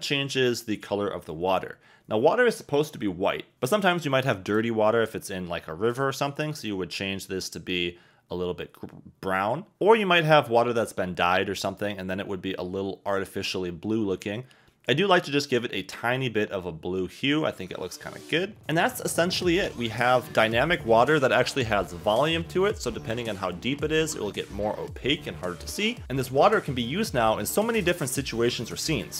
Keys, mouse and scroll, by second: 4.5 click, 18.6 Escape, 18.6 g, 18.6 z, 19.6 g, 19.8 z, 24.1 Escape.